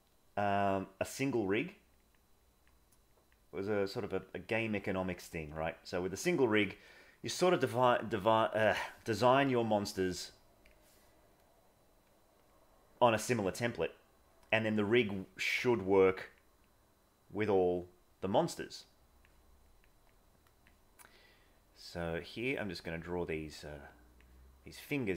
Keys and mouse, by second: 0.9 click, 1.5 click, 2.4 click, 3.0 click, 3.9 click, 4.4 click, 4.9 click, 6.0 click, 9.5 click, 13.3 click, 13.7 click, 16.2 click, 16.7 click, 18.4 click, 18.9 click, 19.7 click, 20.2 click, 21.3 click, 22.5 click, 23.5 click, 24.7 click.